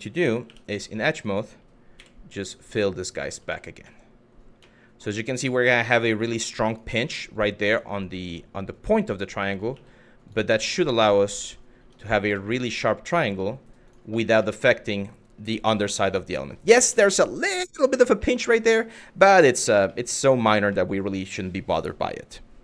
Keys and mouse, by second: 0.1 2, 0.3 click, 1.6 f, 2.2 click, 3.1 f, 3.5 middle click, 4.4 middle click, 6.3 shift+click, 6.6 f, 7.5 click, 9.3 f, 9.9 click, 11.1 click, 11.4 Tab, 11.9 middle click, 12.4 drag, 12.8 middle drag, 13.5 click, 13.8 middle click, 14.1 shift+middle click, 15.5-16.1 middle drag, 16.7 shift+middle drag, 17.1 middle drag, 19.5-19.9 middle drag, 20.3-21.5 middle drag.